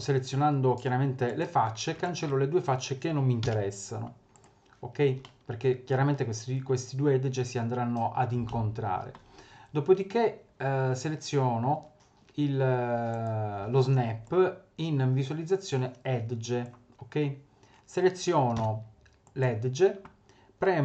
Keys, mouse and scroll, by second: 1.2 click, 2.0 shift+click, 3.4 Delete, 5.2 middle click, 8.7 middle click, 13.1 click, 14.2 click, 18.6 2, 19.2 click.